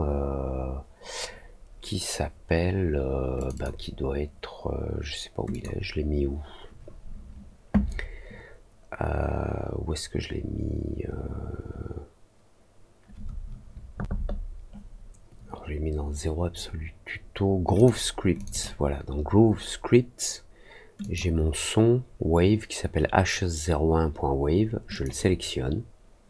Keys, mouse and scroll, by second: 3.3 click, 3.5 click, 5.4 click, 10.3 middle click, 17.7 click, 18.3 click, 18.5 click, 20.9 click, 24.8 click.